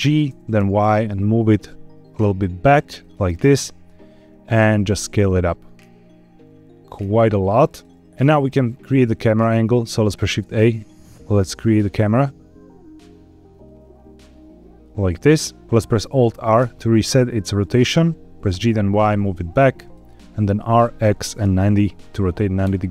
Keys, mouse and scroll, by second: 0.2 g, 0.5 y, 2.9 shift+click, 3.3 scroll down 3, 4.5 s, 7.6 click, 8.0 middle click, 9.6 shift+a, 16.5 alt+r, 17.2 middle click, 18.4 g, 18.6 y, 19.7 click, 20.5 r, 20.9 x, 21.3 KP_9, 21.4 KP_0, 22.5 KP_Enter.